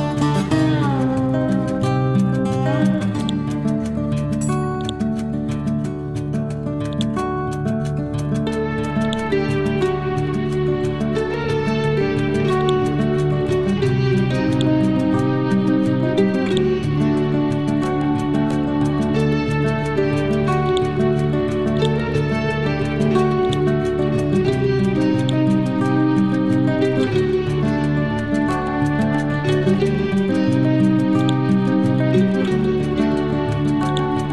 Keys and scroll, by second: 27.5 t, 28.6 ctrl+g, 28.9 ctrl+c, 29.3 ctrl+v.